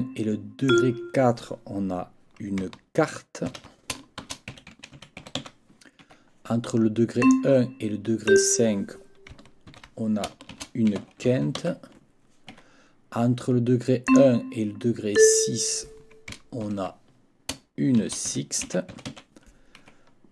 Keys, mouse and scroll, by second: 0.7 click, 3.5 ctrl+t, 4.0-5.9 typing, 6.0 Escape, 7.2 click, 8.3 click, 9.7 ctrl+t, 10.3-12.1 typing, 12.5 Escape, 14.1 click, 15.2 click, 16.6 ctrl+t, 17.7-19.6 typing, 19.8 Escape.